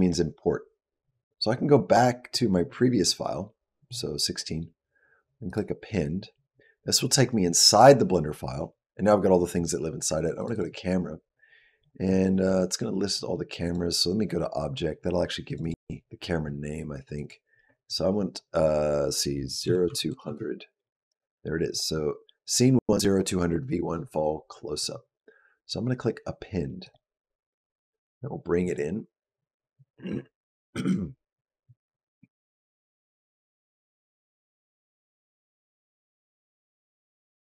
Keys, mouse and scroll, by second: 32.2-33.7 scroll down 4, 33.7-34.0 scroll up 3, 35.3-37.5 scroll down 8.